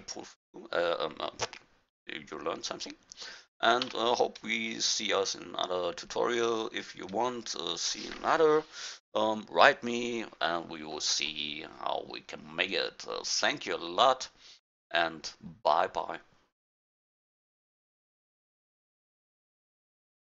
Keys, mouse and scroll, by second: 1.2-2.2 middle drag, 3.8 a, 3.8 q, 16.6 click.